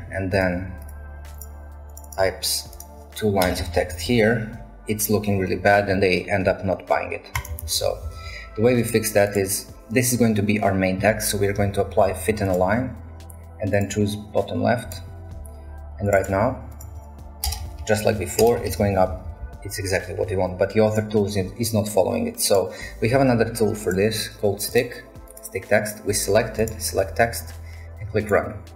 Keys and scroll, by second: 3.4 Return, 3.6 a, 3.8 a, 3.9 a, 7.6 ctrl+z, 8.0 ctrl+z, 17.5 Return, 17.8 Return, 18.0 a, 18.2 a, 18.4 shift+Return, 18.5 a, 18.7 a, 19.3 ctrl+z.